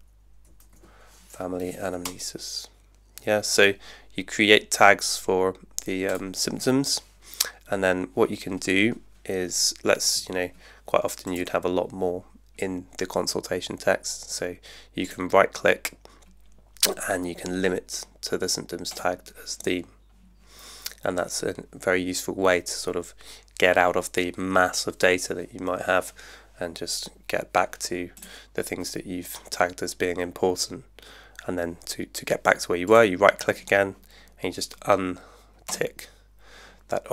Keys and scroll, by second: 0.0-1.2 typing, 2.0 Return.